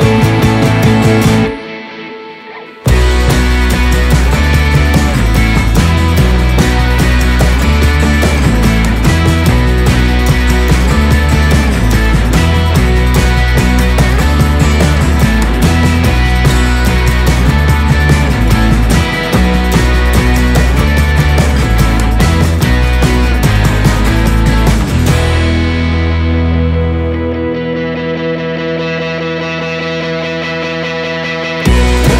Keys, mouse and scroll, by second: 7.0 click, 11.7-12.0 scroll up 1, 14.5 Left, 16.8 alt+scroll down 1, 17.4 alt+scroll down 1, 18.6 click, 22.5 Left, 23.1 Left, 25.0 click, 26.7 Return, 27.5 scroll up 1, 28.3 scroll up 1, 28.4 click, 30.3-30.6 scroll down 1.